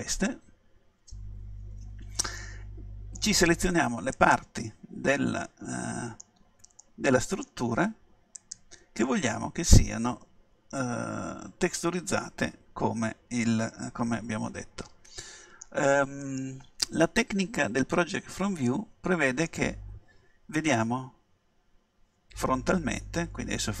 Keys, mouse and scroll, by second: 0.6-1.8 middle drag, 1.8-2.4 scroll down 1, 2.4-4.2 middle drag, 4.2-5.9 right drag, 5.2-8.9 middle drag, 8.4-10.3 right drag, 9.1-11.0 middle drag, 16.3-18.9 middle drag, 20.9 KP_1.